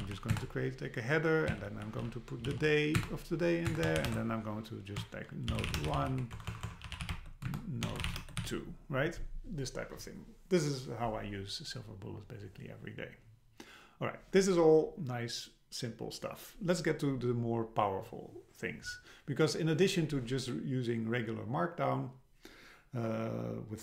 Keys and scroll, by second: 0.3 Return, 3.0 Return, 6.3 BackSpace, 6.9 BackSpace, 7.5 Return.